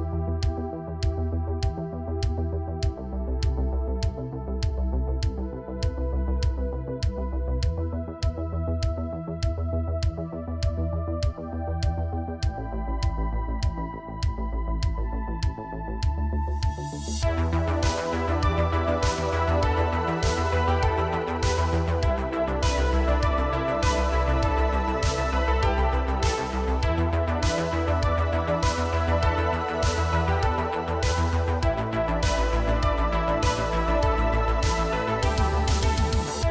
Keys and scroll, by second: 0.6 Tab, 6.9 x, 8.5 x, 13.6 g, 16.0 g, 17.7 g, 22.3 g, 23.7 s, 24.9 g, 25.7 Tab, 31.7 ctrl+Tab, 33.0 r, 33.2 z, 36.0 r, 36.2 z.